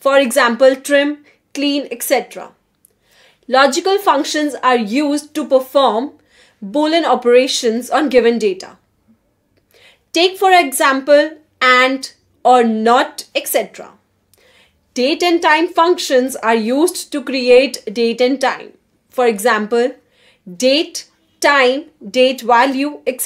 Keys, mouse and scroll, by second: 1.1 shift+9, 2.1 shift+a, 3.4 8, 4.0 shift+0, 4.8 Return, 6.3 click, 11.8-14.7 typing, 15.3 Return, 17.1 click, 17.5-23.2 typing.